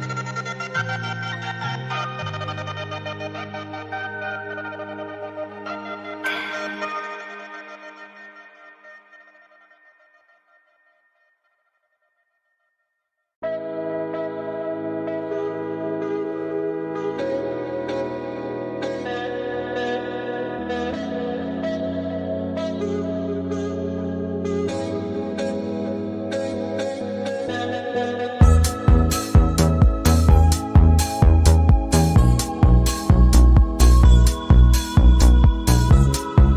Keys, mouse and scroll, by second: 0.8 alt+scroll down 1, 1.1 space, 1.2 click, 1.4 space, 2.2 shift+click, 3.0 right click, 4.1 click, 6.8 click, 8.3-8.7 alt+scroll up 2, 9.1 alt+scroll up 1, 10.5 space, 14.2-19.3 drag, 19.3 Down, 20.3 click, 21.7 click, 21.8 alt+scroll up 1, 23.6 click, 25.0 click, 25.7 Up, 26.6 Left, 27.6 Up, 30.2 alt+scroll down 1, 31.4 click, 32.3 ctrl+2, 33.1 click, 34.3-36.5 drag.